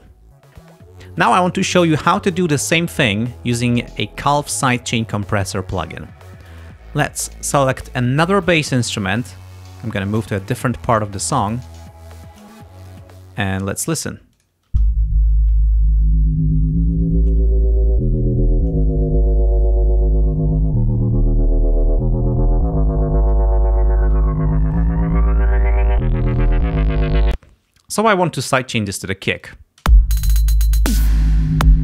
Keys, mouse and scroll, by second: 6.9-7.5 scroll down 2, 8.5 click, 9.6 ctrl+scroll down 2, 10.8 click, 11.5 ctrl+scroll up 2, 14.4 click, 14.7 space, 23.6-24.0 ctrl+scroll down 2, 27.3 space, 29.5 click, 29.9 space, 31.4 ctrl+scroll up 2.